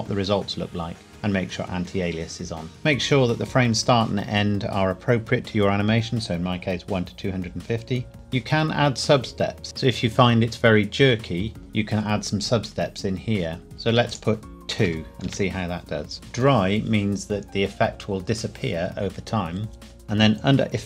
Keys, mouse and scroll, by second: 14.1 click, 14.8 KP_2, 15.2 KP_Enter, 16.1-17.4 scroll down 1, 19.8-20.2 scroll down 1.